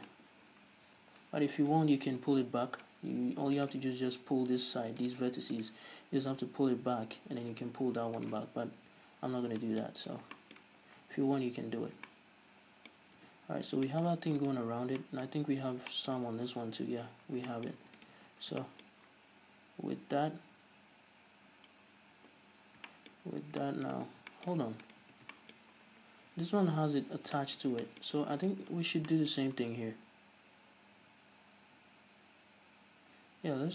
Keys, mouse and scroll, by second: 0.0 Tab, 0.3 scroll up 1, 0.9 a, 1.4-3.2 scroll down 1, 3.2-3.8 scroll up 1, 3.8 alt+right click, 5.2-6.4 right drag, 6.4 g, 8.5 right click, 8.9 a, 9.3 scroll down 1, 9.8-14.6 shift+middle drag, 10.3 scroll down 1, 11.0 scroll down 2, 11.2 Tab, 11.8 scroll up 2, 12.0 scroll down 2, 13.2 scroll up 2, 13.4 Tab, 13.7-14.1 scroll up 2, 14.4 Tab, 14.6 right click, 14.8 Tab, 15.2-18.2 shift+middle drag, 17.4 scroll down 1, 18.0 Tab, 18.2 right click, 18.4 Tab, 18.5 scroll up 2, 18.8-25.0 shift+middle drag, 19.1-21.5 scroll up 2, 21.5-22.5 scroll up 1, 22.5 scroll up 1, 22.8 scroll down 2, 24.3 scroll down 2, 24.9 Tab, 25.0 right click, 25.3 Tab, 25.5-28.6 shift+middle drag, 25.7-27.3 scroll up 2, 27.3 scroll down 2, 28.5 Tab, 28.6 right click, 28.8 Tab, 28.9-29.3 scroll up 2, 29.3-33.7 shift+middle drag, 29.5-33.2 scroll up 2, 33.2-33.6 scroll up 1.